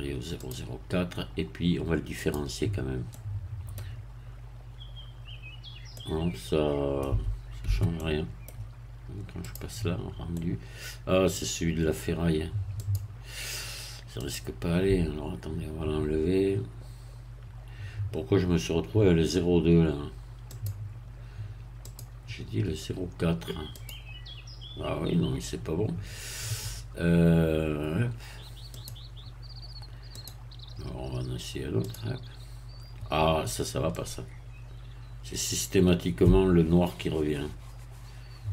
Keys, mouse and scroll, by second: 0.5 click, 2.2 click, 3.1 middle click, 5.9-7.2 middle drag, 7.1 Tab, 7.9 middle click, 9.5 click, 10.3-11.4 middle drag, 12.8 click, 14.3 click, 20.5 click, 21.9 click, 23.7 click, 28.7 click, 30.1 click, 31.9 click, 33.9-38.5 middle drag.